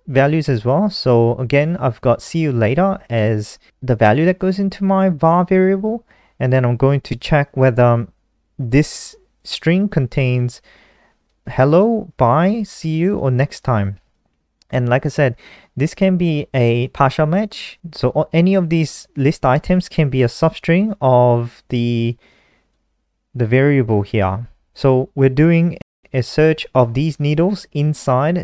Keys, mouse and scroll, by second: 2.7 click, 14.6 click.